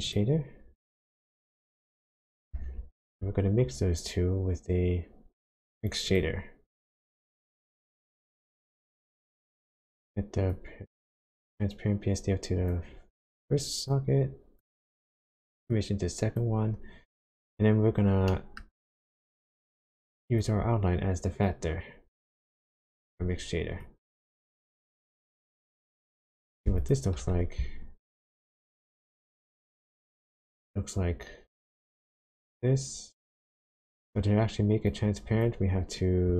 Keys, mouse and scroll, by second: 2.6 shift+a, 8.3 click, 10.5 click, 13.9 click, 15.7 click, 18.0 scroll down 1, 18.3 middle click, 18.8-20.0 scroll up 1, 20.0 click, 21.4 click, 23.8 click, 24.5 click, 25.8 click, 26.3 click, 27.3-27.7 ctrl+shift+click, 32.3 click, 34.8 click.